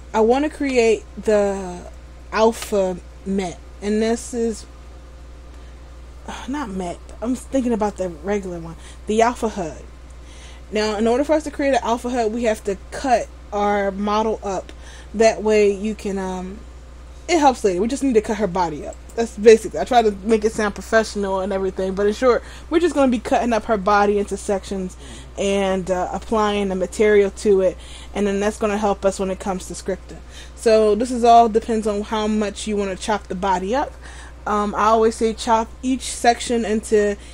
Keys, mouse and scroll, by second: 19.1 right click.